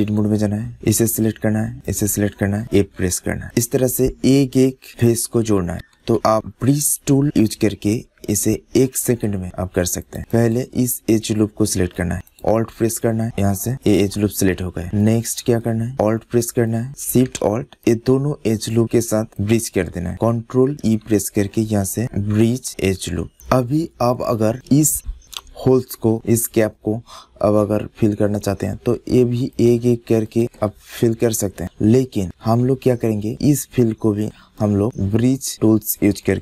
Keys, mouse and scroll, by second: 0.5 middle click, 0.7 click, 0.9 middle click, 1.1 click, 1.7 click, 2.6 f, 3.3 middle click, 4.9 middle click, 6.0 ctrl+z, 6.2-8.2 middle drag, 8.7 click, 11.1-12.5 middle drag, 13.7 middle click, 14.4-15.7 middle drag, 15.9 middle click, 16.2 middle click, 17.7-19.1 middle drag, 19.3 middle click, 20.5 middle click, 20.7 ctrl+e, 24.0 middle click, 24.9 middle click, 25.7 middle click, 26.1 middle click, 26.3-28.0 middle drag, 29.4-31.4 drag, 30.9 f, 31.4 middle click, 31.9 click, 32.5 ctrl+z, 32.7 middle click, 33.1 click, 33.1 middle click, 33.2 click, 33.3-35.5 middle drag.